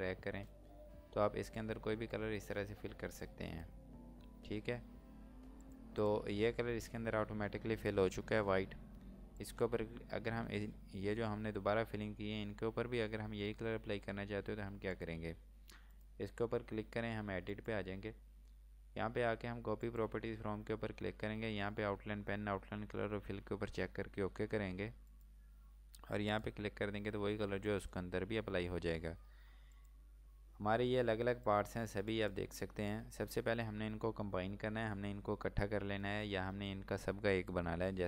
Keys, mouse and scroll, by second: 9.3 click, 14.9 click, 25.1 click, 29.8 click, 30.3 scroll down 1, 30.7 scroll up 1, 31.5 click.